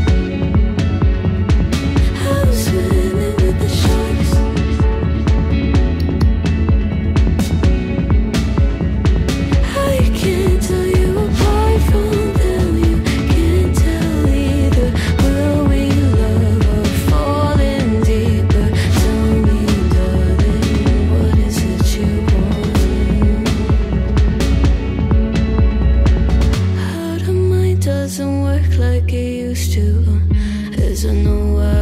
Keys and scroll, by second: 16.9 ctrl+z, 30.1 ctrl+z, 31.5 ctrl+z, 31.7 ctrl+z.